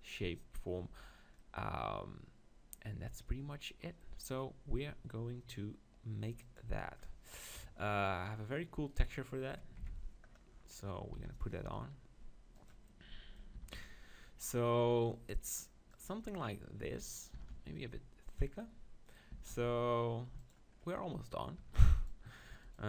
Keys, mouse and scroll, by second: 6.4-8.2 drag, 7.5 KP_7, 8.2 middle click, 8.9-10.7 drag, 9.8 ctrl+KP_7, 10.7-12.6 middle drag, 11.2 s, 12.7-14.2 drag, 13.6 s, 14.2-15.6 middle drag, 16.0-18.3 drag, 17.3 s, 18.4-20.2 drag, 19.3 s, 20.2 middle click, 20.5 click, 21.4 middle click, 21.6 Tab.